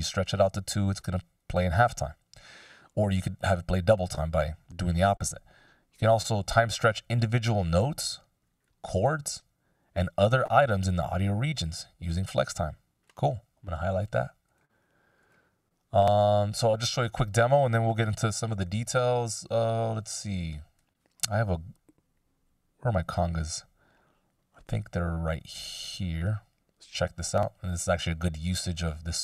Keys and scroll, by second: 20.0 x, 21.1 F16.